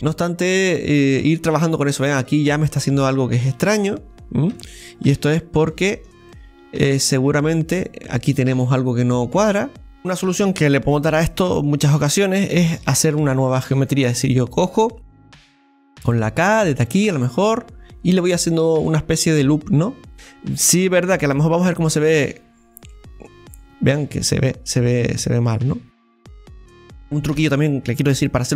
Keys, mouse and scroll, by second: 4.9-5.7 scroll up 3, 5.7-9.3 middle drag, 10.0 middle click, 10.0-11.0 scroll up 1, 11.0-11.3 scroll up 1, 11.4 middle click, 11.8 scroll down 1, 12.2-16.3 middle drag, 16.3 k, 20.1-21.6 middle drag, 22.5 click, 22.9-25.9 middle drag, 26.5 KP_7, 26.6-28.5 scroll down 1.